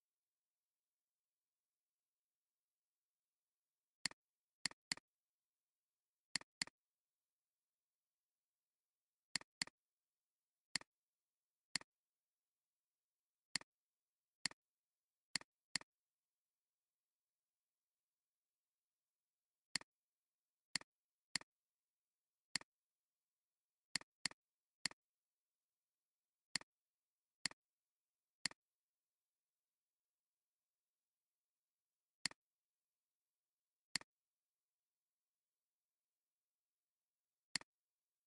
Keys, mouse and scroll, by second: 4.8 double click, 12.6 alt+scroll up 1, 13.3 space, 14.0 alt+scroll down 1, 14.4 space, 14.9 alt+scroll down 1, 15.2 space, 16.4 alt+scroll up 1, 19.2 alt+scroll down 1, 19.6 space, 20.0 alt+scroll down 1, 21.1 space, 22.5 alt+click, 24.3 double click.